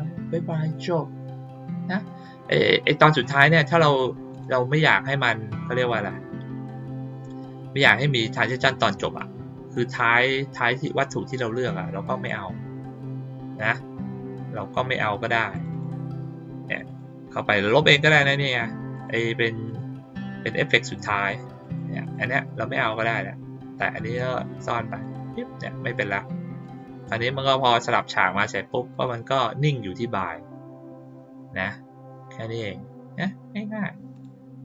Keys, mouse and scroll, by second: 4.2 click, 7.4 click, 10.5 click, 15.5 click, 15.6 click, 16.6 click, 16.8 click, 18.1 click, 18.9 click, 19.6 click, 20.2 click, 20.6 click, 21.1 click, 21.5 click, 21.9 click, 22.7 click, 24.8 click, 26.5 click, 27.6-28.0 drag, 28.8 click, 34.1 click.